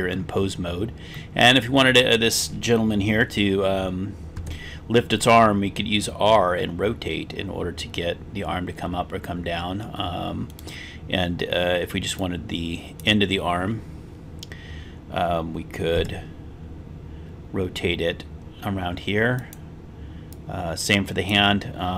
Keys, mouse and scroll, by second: 1.2-1.8 middle drag, 4.5 r, 10.7 right click, 12.2-13.1 drag, 16.1 r, 19.5 drag, 20.3-21.4 drag.